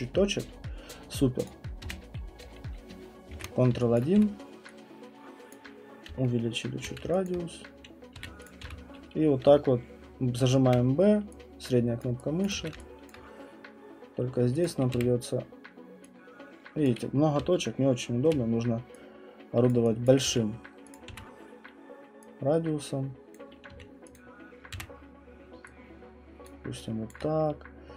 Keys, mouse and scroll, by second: 1.4 click, 1.8 b, 3.7 ctrl+1, 4.0 click, 4.1 w, 5.5 click, 6.1-6.8 typing, 6.8 middle click, 7.3 alt+click, 8.1-10.7 typing, 8.5 click, 10.7 middle click, 12.0 click, 12.4 click, 12.6 q, 13.1 alt+click, 14.6 click, 14.9 w, 16.8 click, 17.4-18.3 typing, 18.3 middle click, 19.7 click, 20.1 click, 20.2 q, 20.9 click, 21.1 w, 23.3 click, 23.7 q, 24.1 click, 24.7 w, 26.4 click, 27.1 alt+click.